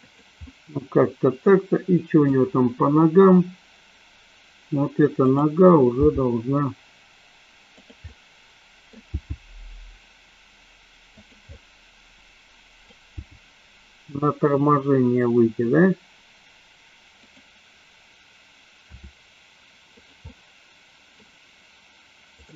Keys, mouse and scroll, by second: 0.1 click, 0.4-2.2 middle drag, 5.2 click, 5.9 g, 7.7 click, 8.1 scroll up 1, 8.2 middle click, 9.2 g, 11.1 click, 11.6-12.8 middle drag, 13.2 g, 17.3 click, 18.8 r, 19.9 click, 20.2 middle click.